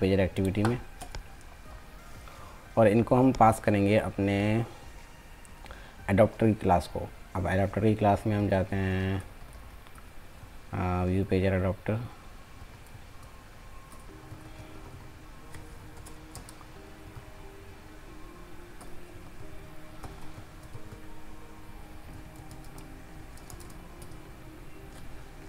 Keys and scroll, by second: 23.5 ctrl+space.